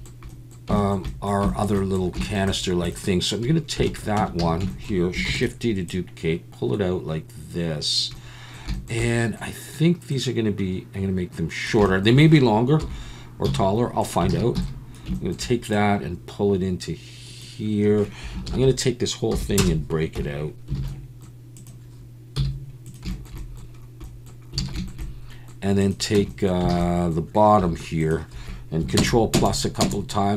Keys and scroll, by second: 4.2 Tab, 4.4 a, 5.3 shift+d, 12.8 KP_7, 13.5 z, 14.3 alt+a, 14.6 b, 15.4 KP_7, 18.5 ctrl+l, 19.3 p, 20.2 Tab, 20.8 alt+a, 20.8 ctrl+l, 20.8 p, 22.4 z, 24.6 alt+a, 26.2 Tab, 26.7 alt+a, 27.6 3, 29.0 ctrl+KP_Add, 29.3 ctrl+KP_Add, 29.8 ctrl+KP_Add.